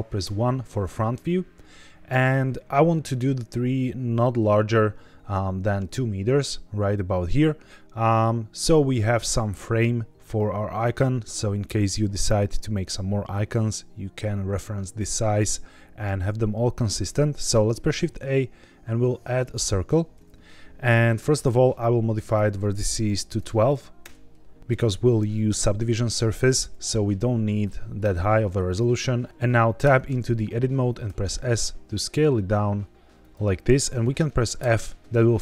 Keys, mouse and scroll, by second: 0.1 KP_1, 1.3-3.2 scroll up 3, 17.4 shift+a, 21.2 click, 22.1-23.9 drag, 29.3 Tab, 29.8 Tab, 31.0 s, 33.1 click, 34.5 f, 34.9 middle click, 35.0 scroll down 4, 35.0 KP_1, 35.2 middle click.